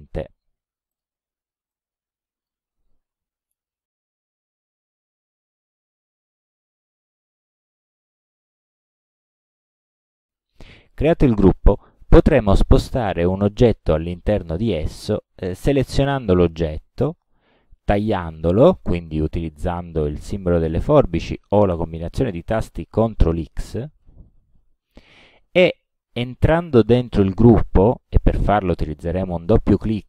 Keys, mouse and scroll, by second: 0.9 click, 1.7 click, 3.5 space, 5.4 click, 8.3 shift+click, 13.5 ctrl+g, 16.2 click, 17.3 click, 24.0 ctrl+x, 29.6 click.